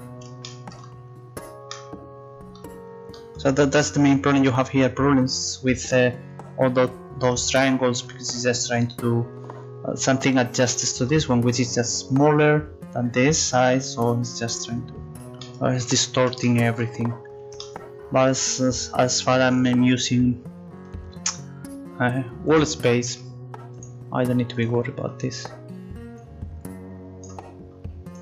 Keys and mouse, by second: 10.7-11.8 right drag, 22.5-24.6 drag.